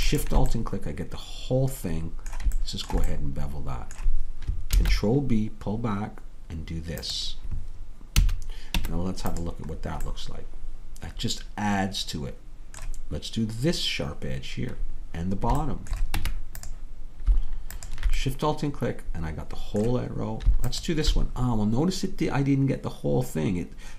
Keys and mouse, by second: 0.3-3.4 drag, 0.6-3.4 middle drag, 4.8 ctrl+b, 8.2 a, 8.8 Tab, 16.2 Tab, 19.7-23.9 middle drag.